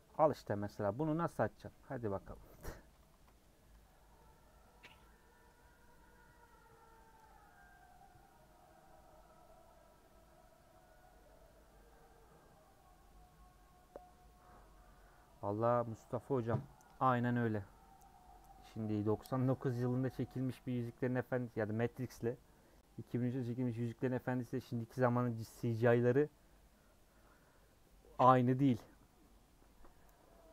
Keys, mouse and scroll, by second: 0.6 /, 1.1-3.4 middle drag, 3.4 scroll down 3, 3.7 Tab, 3.8-30.5 middle drag.